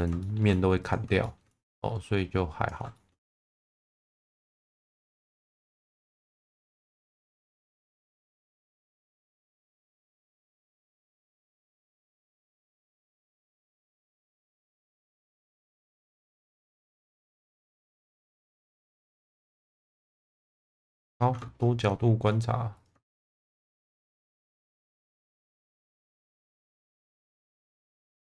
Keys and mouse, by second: 0.2 shift+middle click, 0.8 click, 1.2 shift+middle click, 1.8 click, 2.9 shift+middle click, 3.3 click, 4.8 shift+middle click, 6.2 click, 8.2 click, 9.1 shift+middle click, 9.9 click, 12.7 click, 15.0 click, 15.8 click, 16.4 click, 18.6 click, 20.0-21.2 middle drag, 23.2 shift+v, 24.2 click, 24.7 shift+middle click, 26.2 click, 27.1-28.2 drag.